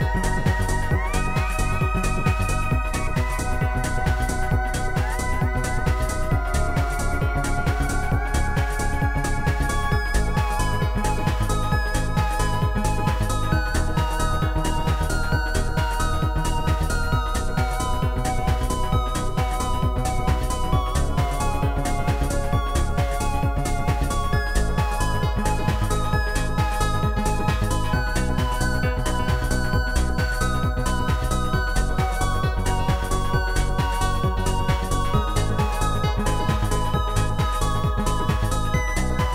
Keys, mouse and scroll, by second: 0.1 click, 1.5 Return, 1.5 click, 2.7 Return, 3.8 click, 4.4 click, 4.8 click, 5.4 click, 5.9 click, 8.0 click, 9.0 click, 10.0 click, 10.5 click, 12.5 click, 13.1 shift+click, 14.2 shift+click, 15.3 right click, 16.5 shift+click, 17.3 click, 17.3 right click, 18.1 click, 19.1 click, 21.4 click, 21.5 right click, 22.0 click, 23.4 click, 23.4 right click, 23.7 click, 24.9 click, 26.3 right click, 26.3 click, 26.9 click, 28.0 click, 28.0 right click, 28.9 shift+click, 30.2 shift+click, 32.5 right click, 35.9 click, 36.9 click, 37.6 click, 39.1 ctrl+z.